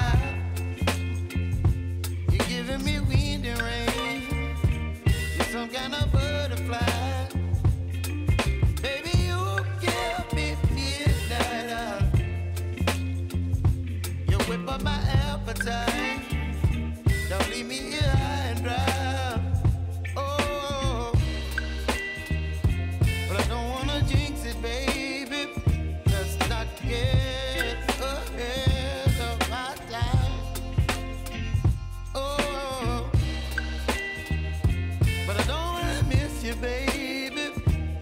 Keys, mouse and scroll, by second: 0.2 Return, 1.2 click, 1.6 space, 4.7 space, 6.9 click, 7.6 F9, 8.6 click, 9.0 F9, 10.2-11.8 drag, 11.8 F9, 14.0-19.5 drag, 19.5-23.0 drag, 23.0-25.6 drag, 25.6-30.5 drag, 30.9 space, 34.1 space, 34.8 click, 35.9 j, 37.3 click.